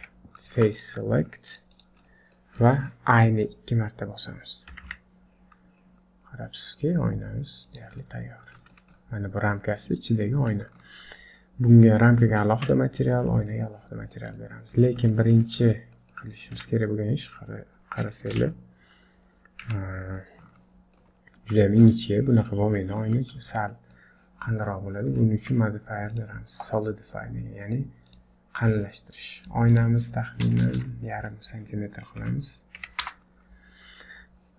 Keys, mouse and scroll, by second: 0.0 3, 0.4 click, 0.7 shift+click, 1.5 click, 2.0 middle click, 2.6 scroll up 3, 2.9 shift+middle click, 3.3 middle click, 4.7 i, 8.0 middle click, 8.8 shift+middle click, 10.3 middle click, 10.8 shift+middle click, 11.5-11.8 scroll down 3, 12.5 Tab, 13.3 middle click, 14.2 middle click, 15.1 shift+middle click, 15.4 shift+middle click, 15.5-16.6 scroll up 4, 16.0 middle click, 16.6 KP_7, 17.4-18.1 scroll down 9, 18.1 middle click, 18.4 Tab, 18.9 scroll down 2, 19.7 KP_Decimal, 20.2 scroll up 4, 20.6 shift+middle click, 21.2 scroll up 1, 21.7 shift+middle click, 22.1 middle click, 23.1 shift+middle click, 23.5 scroll down 2, 23.7 middle click, 25.4 Tab, 26.1 click, 29.4 click, 30.6 BackSpace, 30.8 BackSpace, 34.3-34.5 scroll down 2.